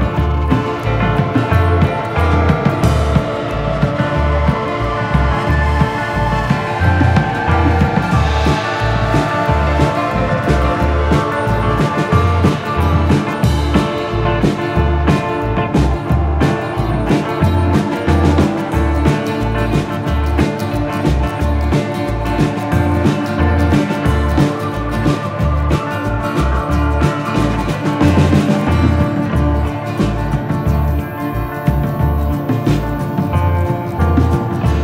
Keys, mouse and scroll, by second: 0.2 scroll up 1, 0.4 scroll down 1, 0.6 middle click, 1.0 z, 1.9 click, 2.8 middle click, 4.5 scroll up 1, 5.0 scroll down 1, 5.2 middle click, 7.8 click, 9.2 click, 13.3 click, 14.5 ctrl+v, 16.8 click, 17.4 click, 18.7 click, 20.6 click, 21.0 middle click, 23.2 click, 26.7 click, 27.4 click, 30.8 click, 31.7 click, 32.0 middle click, 32.3 z, 33.2 scroll up 1, 33.6 scroll down 1, 34.2 shift+middle click.